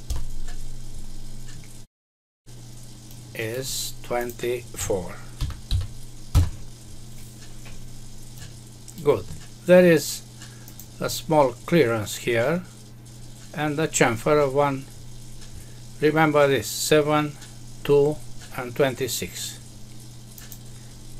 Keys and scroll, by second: 0.1 Return, 6.3 Return.